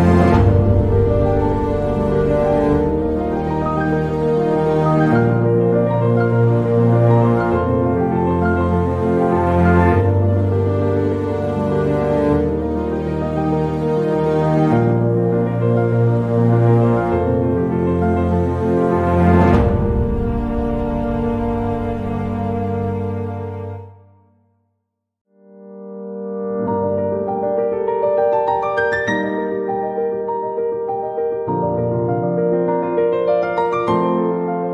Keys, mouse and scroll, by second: 0.0 s, 2.6-3.8 drag, 15.3 shift+click, 15.8 shift+click, 17.5 ctrl+r, 21.0 ctrl+r, 22.6 click, 23.9 click, 25.8 shift+click, 32.0-34.6 right drag, 34.6 s.